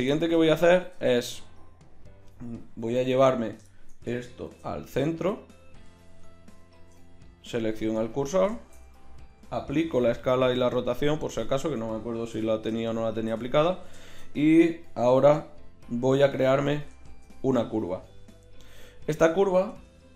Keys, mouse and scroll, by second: 4.4 shift+c, 6.8 shift+s, 9.7 ctrl+a, 12.4 n, 17.0 shift+a, 19.8 Tab.